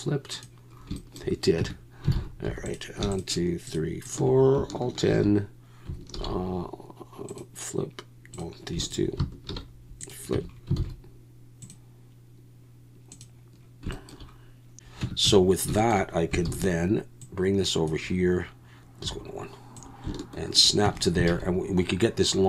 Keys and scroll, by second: 1.6 Tab, 2.1 alt+a, 2.4 3, 5.1 shift+n, 6.1 alt+n, 9.7 alt+n, 10.3 Tab, 10.8 alt+a, 15.0 Tab, 15.2 a, 16.5 shift+d, 19.0 1, 20.8 Tab, 21.3 alt+a.